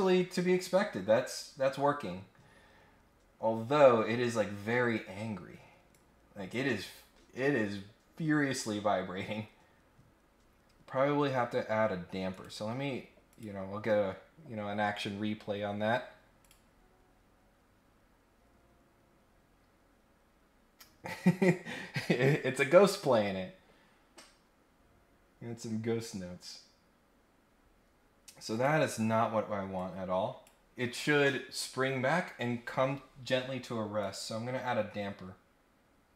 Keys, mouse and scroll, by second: 0.7-1.2 scroll down 2, 1.4-1.7 scroll up 2, 1.9 scroll down 1, 2.1 scroll up 1, 5.9 click, 7.0 scroll down 1, 7.6-8.4 scroll up 2, 8.4 scroll down 1, 8.9 scroll up 1, 9.8-10.2 scroll up 1, 11.5 scroll up 1, 12.3 right click, 13.2 click, 16.4 click, 28.5 click, 29.7 click, 34.0 click, 36.1 scroll down 2.